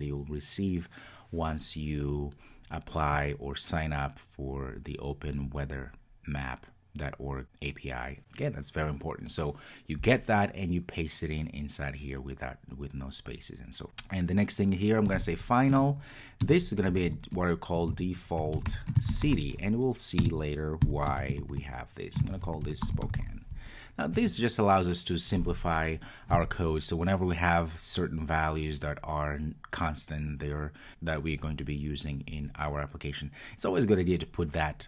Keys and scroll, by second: 15.7 Return.